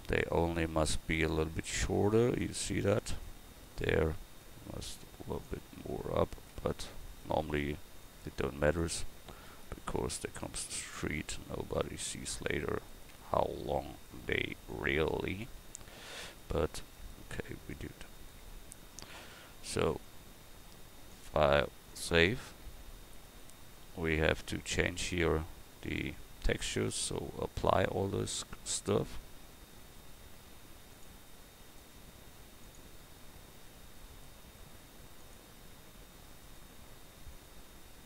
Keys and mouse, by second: 1.4 Tab, 2.2-3.5 right drag, 3.5 click, 4.5 click, 5.8 Tab, 6.5 Tab, 8.9 Tab, 9.7 Tab, 12.3 Tab, 13.1 Tab, 15.7 Tab, 16.5 Tab, 18.4 Tab, 19.7 a, 25.8-27.7 right drag, 27.7-29.8 drag, 29.8-31.6 right drag, 31.6 click.